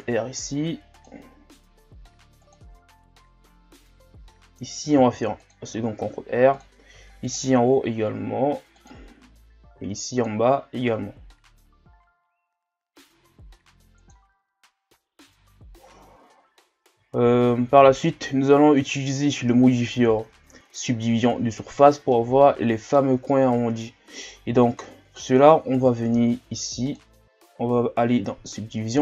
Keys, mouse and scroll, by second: 5.0 ctrl+r, 6.9 ctrl+r, 9.1-9.8 scroll down 2, 9.8 ctrl+r, 15.9-17.2 shift+scroll up 1, 17.2 shift+scroll down 1, 17.5 scroll up 1, 17.7 Tab, 18.5 scroll down 3, 18.8-19.2 middle drag, 19.2-20.0 scroll up 2, 20.0 shift+scroll up 1, 20.6 scroll up 2, 21.5-22.1 scroll down 1, 22.1-24.9 middle drag, 24.9-25.9 drag, 25.9 shift+scroll down 2, 26.8-29.0 drag.